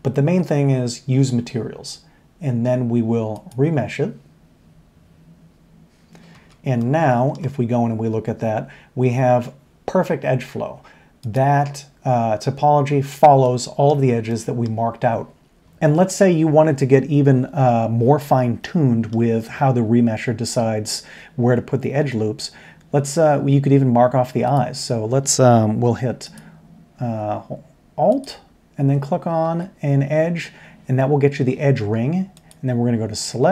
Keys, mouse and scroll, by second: 3.3-6.3 drag, 6.3 Tab, 6.8-7.3 middle drag, 15.7 Tab, 15.9 middle click, 18.6-19.1 middle drag, 21.8 Tab, 26.2 alt+click, 28.1 alt+click.